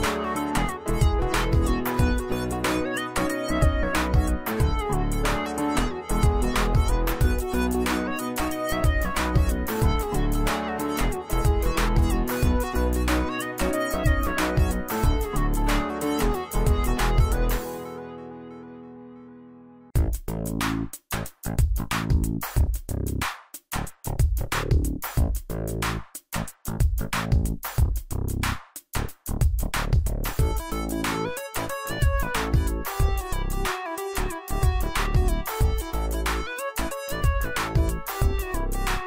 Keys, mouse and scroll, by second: 2.8 right click, 3.5 click, 3.5 right click, 3.6 right click, 4.9 click, 8.3-10.2 drag, 10.7 space, 10.7 click, 10.8-11.3 drag, 20.4 shift+click, 20.9 right click, 22.2 click, 22.7 right click, 24.9-31.4 drag.